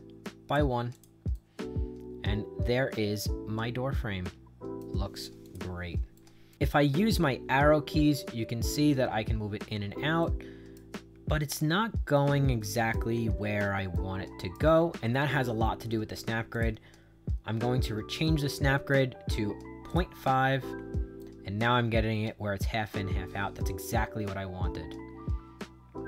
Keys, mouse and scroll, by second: 0.8 click, 1.2-4.7 right drag, 5.3 click, 6.1 right click, 7.4 Up, 7.9 Down, 8.3 Up, 8.8 Down, 9.2 Up, 9.6 Down, 10.1 right click, 11.0 Down, 11.5 Up, 12.1 right click, 13.0 Right, 13.4 Left, 13.8 right click, 14.5 Right, 14.9 Left, 16.4 click, 19.8 click, 20.6 Right, 21.1-26.0 right drag.